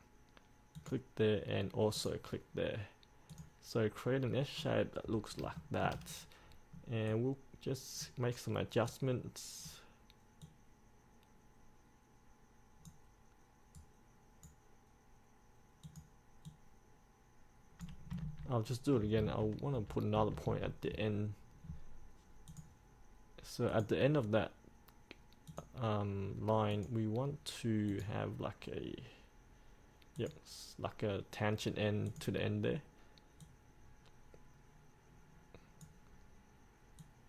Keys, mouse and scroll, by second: 4.7 scroll down 1, 5.2 scroll up 1, 5.7 shift+middle click, 6.2-7.2 scroll down 1, 7.2-13.5 drag, 13.9-15.5 right drag, 16.0 click, 22.6-26.7 drag, 33.6-37.2 drag.